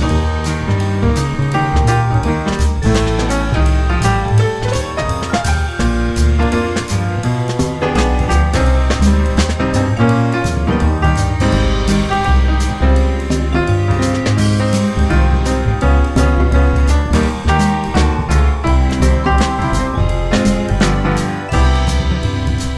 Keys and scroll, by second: 0.2 ctrl+shift+e, 2.7 alt+c, 4.5 ctrl+z, 10.5 ctrl+shift+e, 11.1 2, 11.5 ctrl+r, 11.8 ctrl+c, 13.6 1, 14.6 ctrl+shift+e, 16.0 ctrl+shift+e, 17.0 ctrl+shift+e, 18.4 ctrl+shift+e.